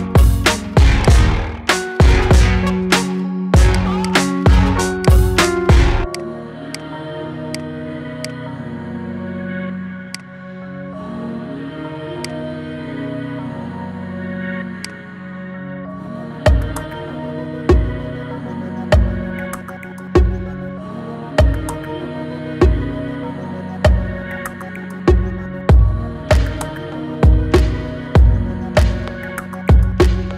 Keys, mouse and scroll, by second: 0.2-0.8 middle drag, 0.8 click, 1.1-1.6 scroll up 5, 1.6-2.7 shift+middle drag, 2.7-3.5 scroll up 2, 3.5 drag, 3.8 shift+click, 4.8 shift+click, 5.2 shift+click, 5.9 shift+click, 6.5 shift+click, 7.3 shift+click, 8.0 shift+click, 9.1 ctrl+j, 9.9-12.9 right drag, 13.7 ctrl+2, 14.2-14.6 scroll down 6, 14.6 click, 15.0 middle click, 15.7-16.1 scroll down 4, 16.1-17.4 middle drag, 17.4-17.9 scroll up 4, 17.9-21.0 middle drag, 22.2-22.8 middle drag, 22.8-23.6 scroll up 3, 23.2 shift+middle click, 23.6-23.9 scroll down 3, 23.9-24.3 middle drag, 24.3-24.9 scroll up 4, 24.9-25.7 middle drag, 25.7 scroll up 1, 25.9-26.3 scroll down 4, 26.3-29.3 middle drag, 29.3-29.9 scroll up 1, 29.9-30.3 scroll down 2.